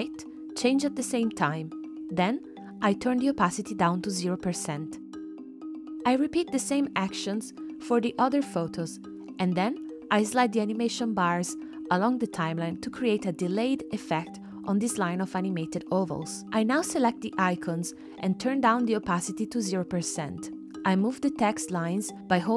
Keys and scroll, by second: 7.5-8.5 typing, 11.7 super+z, 22.1 shift+Right.